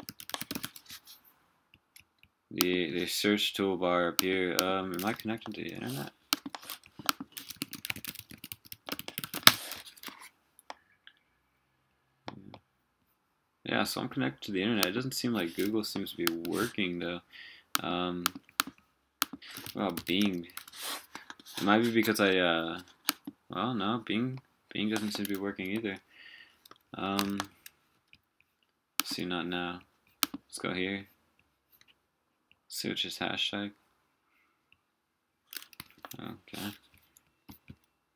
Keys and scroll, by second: 5.1 super+r, 25.5 super+w, 27.3 super+w, 35.8 super+w.